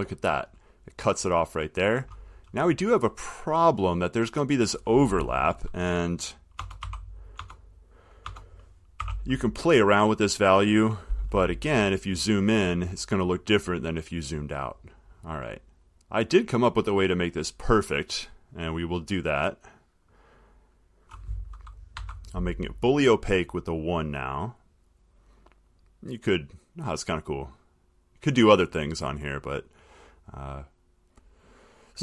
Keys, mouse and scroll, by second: 2.4 middle click, 2.5 middle click, 3.2 middle click, 6.8-9.8 typing, 12.3 middle click, 13.4 middle click, 14.7-16.4 middle click, 16.6 click, 20.2 click, 21.0 click, 22.1 1, 26.0 click, 27.6 click, 30.5 click, 31.6 click.